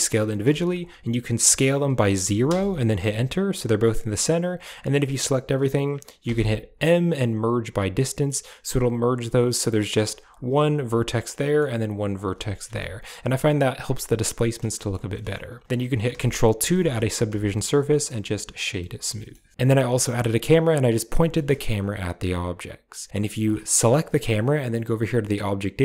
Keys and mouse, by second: 0.3 s, 2.9-4.2 drag, 4.4 a, 4.5 a, 6.1 m, 8.1 click, 9.0 g, 10.0 1, 10.3 right click, 10.5 g, 11.2 middle click, 11.2 click, 12.0 right click, 12.1 g, 12.5 Tab, 12.7 drag, 13.3 drag, 14.6 shift+click, 15.0 middle click, 16.1 ctrl+2, 16.7 shift+middle drag, 17.2 w, 18.7 middle drag, 19.1 shift+middle drag, 19.5 middle click, 19.9 g, 21.2 shift+middle click, 23.1 click, 23.7 g.